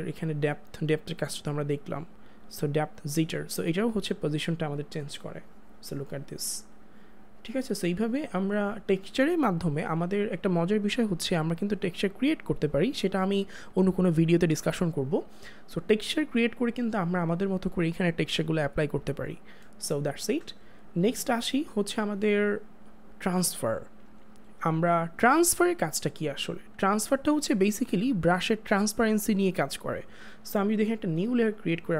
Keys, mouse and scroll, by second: 0.4 click, 3.0 click, 25.5 click, 31.5 click.